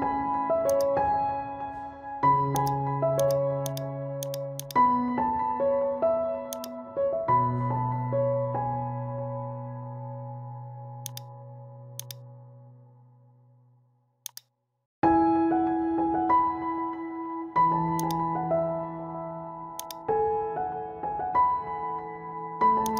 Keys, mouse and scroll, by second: 0.0-0.3 typing, 0.7 click, 2.0 ctrl+z, 2.5-11.1 drag, 11.1 click, 15.7 ctrl+z, 18.0 click, 18.9 ctrl+z, 19.8 click.